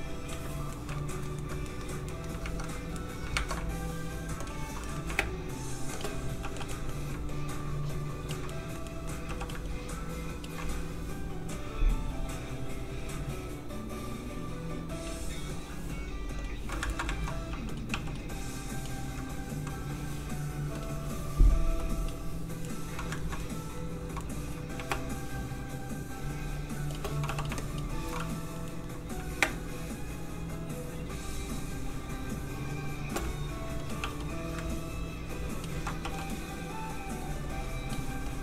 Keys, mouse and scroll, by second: 0.7 middle click, 0.9 shift+middle click, 3.0 ctrl+shift+Tab, 3.0 middle click, 4.4 click, 4.8 middle click, 5.1 shift+space, 5.9 shift+click, 6.4 shift+f, 6.7 middle click, 7.3 ctrl+click, 8.5 click, 8.6 middle click, 9.3 f, 9.4 click, 9.6 ctrl+click, 11.5 click, 11.6 click, 16.9 ctrl+middle click, 17.0 shift+middle click, 17.5 shift+f, 17.7 click, 18.1 click, 22.7 middle click, 23.2 ctrl+middle click, 23.4 middle click, 24.9 shift+space, 26.9 shift+click, 27.2 shift+f, 27.4 click, 27.6 shift+click, 28.2 click, 28.3 middle click, 29.4 shift+space, 33.6 space, 33.8 click, 34.0 f, 34.1 click, 34.6 ctrl+click, 35.7 ctrl+z, 36.1 click, 36.3 middle click, 37.3 click, 38.3 shift+click.